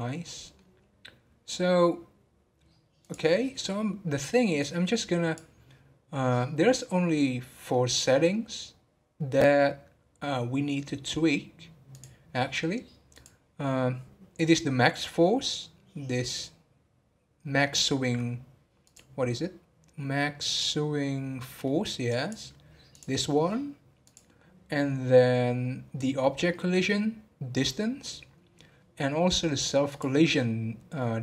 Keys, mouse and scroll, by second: 5.0-6.9 drag, 6.9-11.6 middle drag, 20.7-24.1 drag, 25.1-26.0 scroll down 1, 29.9 click.